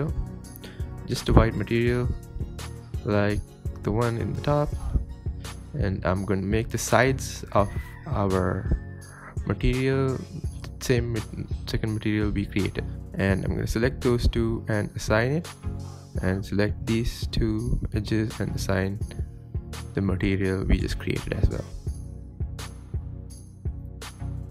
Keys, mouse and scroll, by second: 0.1 click, 2.7 click, 3.1 middle click, 3.4-3.8 scroll down 3, 3.8-6.6 middle drag, 6.6 x, 7.4 ctrl+v, 9.2 click, 9.9 click, 10.2 KP_7, 10.5 Tab, 10.7 scroll down 3, 10.9 shift+middle click, 11.2 click, 12.0 click, 12.4 click, 13.1 click, 13.8 click, 14.4 click, 14.7 click, 14.9 scroll up 5, 15.2 middle drag, 15.4 scroll down 4, 15.6 shift+middle drag, 15.9-16.7 scroll up 4, 16.1-16.5 middle drag, 17.0 click, 17.9 shift+click, 18.4 click, 18.7 click, 19.2 Tab, 19.4 scroll down 1, 19.6-20.2 middle drag, 20.2-20.8 scroll up 4, 20.4 middle drag, 20.8 shift+middle drag, 21.1 Tab, 21.4 click, 21.7 click, 22.4 drag, 22.7 click, 22.9 Tab, 23.0 scroll down 5, 23.2 scroll up 1, 23.2 middle click, 23.4 scroll down 3, 23.7-24.5 shift+middle drag.